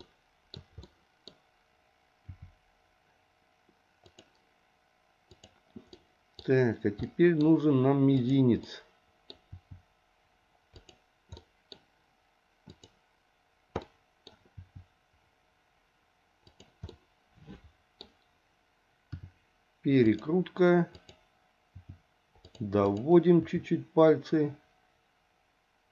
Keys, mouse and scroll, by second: 0.0 shift+middle click, 0.8 middle click, 2.3 r, 5.3 click, 5.9 middle click, 7.1 middle click, 8.2 click, 8.6 middle click, 9.5 r, 11.4 middle click, 12.7 click, 13.9 middle click, 14.6 r, 16.9-18.0 middle drag, 18.0-19.1 scroll down 1, 19.1 r, 20.9 click, 21.7 r, 22.9 click, 23.4 r.